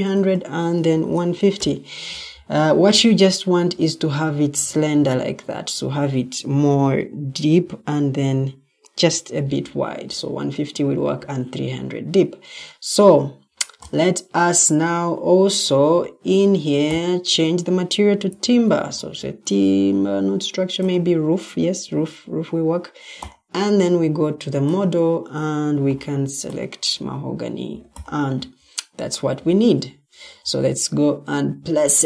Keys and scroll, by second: 0.6-1.9 typing, 18.2 t, 19.1 t.